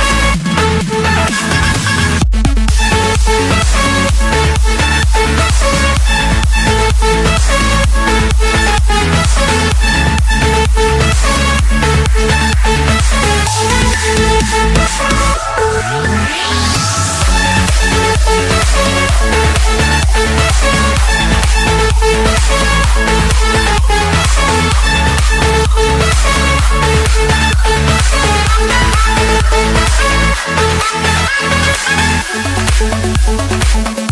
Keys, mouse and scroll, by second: 0.7 click, 1.0 Return, 2.9 click, 4.1 Escape, 5.2 click, 6.1 click, 6.3 scroll, 7.2 click, 7.8 click, 8.1-8.8 scroll, 9.2 scroll, 10.0 click, 10.3 scroll, 10.6 Escape, 11.3 click, 12.7 m, 13.1 Return, 15.1-16.3 drag, 17.1 1, 17.6 Return, 18.5 Escape, 20.4-20.9 typing, 21.5 Return, 22.4 click, 22.7 Return, 24.3-25.4 drag, 26.6-27.7 drag, 29.3-30.5 drag, 30.6-31.1 typing, 32.4 Return.